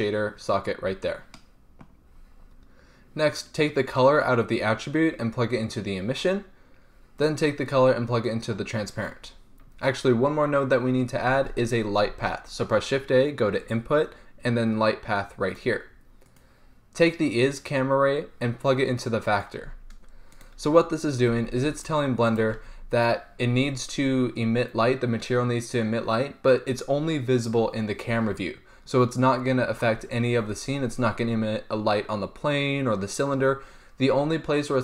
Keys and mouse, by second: 7.4-9.3 drag, 11.6 shift+a, 16.6-19.6 drag, 20.5-22.2 drag, 21.5 g, 22.4-23.2 drag, 22.7 g.